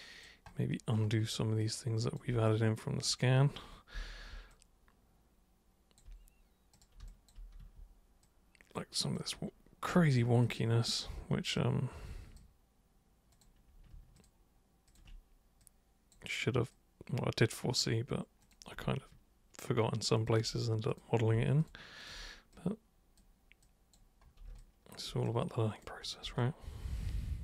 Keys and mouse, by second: 1.6 alt+super+click, 3.0 super+click, 4.0 super+f, 4.5-6.0 alt+super+drag, 6.8 super+click, 7.1 alt+super+click, 7.6 super+w, 8.3 super+click, 10.5 ctrl+shift+super+click, 10.9 ctrl+shift+super+click, 11.6 super+click, 13.3 super+click, 14.2 ctrl+shift+super+click, 14.9 ctrl+shift+super+click, 15.6 super+click, 16.8 super+click, 18.5 super+click, 20.3 ctrl+shift+super+click, 20.9 super+click, 21.6 ctrl+shift+super+click, 22.1 ctrl+shift+super+drag, 22.6 super+click, 23.6 super+click, 24.6 alt+super+click, 25.3 super+right click, 26.4-27.4 alt+super+drag.